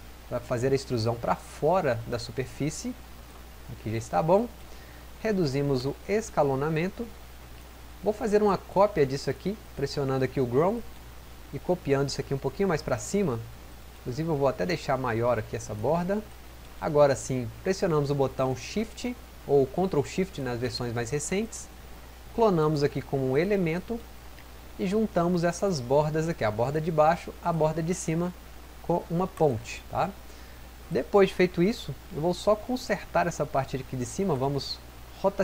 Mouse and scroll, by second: 35.3 click.